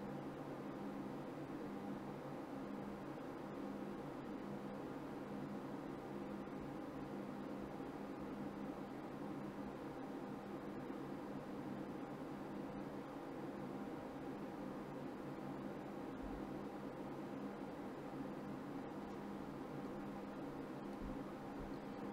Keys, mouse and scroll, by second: 0.1 ctrl+z, 0.6 right click, 1.8 right click, 3.5 middle click, 3.5-4.0 scroll up 1, 5.2 middle click, 5.4 right click, 6.5 click, 7.5 right click, 8.2 click, 8.8 middle click, 9.9 click, 15.1 click, 17.3 click, 17.5 right click, 19.1 middle click, 19.9 Tab.